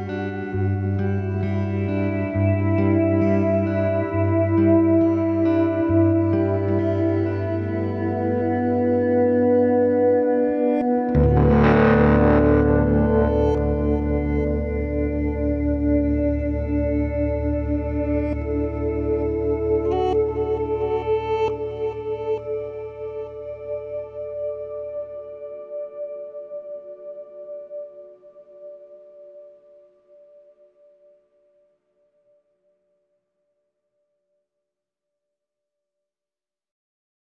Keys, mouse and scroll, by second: 0.0 click, 0.8-1.8 middle drag, 1.8-3.8 scroll down 1, 8.4-8.8 scroll up 1, 8.8 click, 9.8 drag, 10.5 click, 11.0-12.8 drag, 20.0 click, 20.5-21.0 scroll down 1, 21.0 click, 24.5 click, 25.8-27.8 drag, 28.1 click, 28.9-29.7 drag, 31.9 click, 32.4 click, 33.2-36.4 drag.